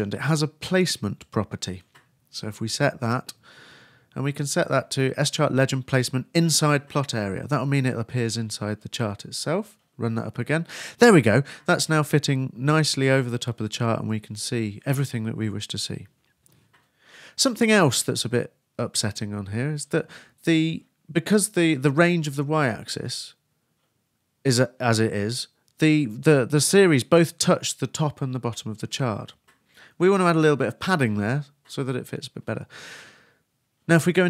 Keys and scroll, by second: 2.5-3.3 typing, 5.4 super+;, 5.5 super+s, 6.1 super+r, 6.7 super+Return.